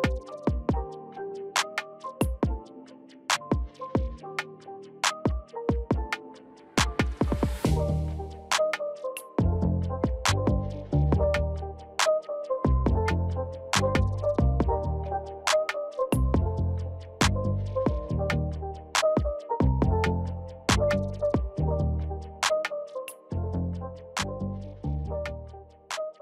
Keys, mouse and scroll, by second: 2.7 alt+click, 4.7 click, 12.5 alt+click, 15.5 click, 23.5 shift+click, 25.5 shift+click.